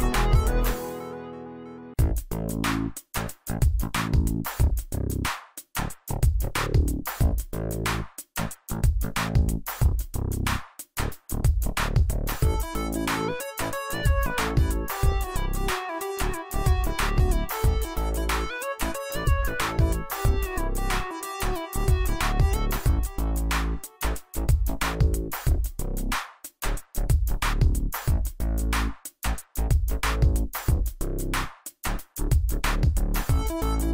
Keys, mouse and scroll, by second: 5.9 Caps_Lock, 7.0 click, 9.2 click, 16.9 click, 18.9 click, 25.5 alt+shift+click, 25.9-27.4 alt+shift+drag, 27.6-29.8 click.